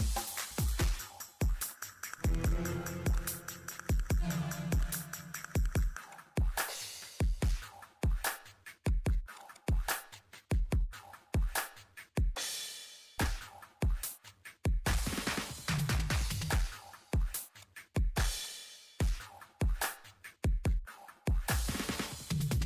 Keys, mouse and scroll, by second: 0.0 scroll up 1, 0.4 scroll down 1, 0.7 click, 14.5 click, 15.0-15.6 scroll up 2, 15.7 click, 21.9 click.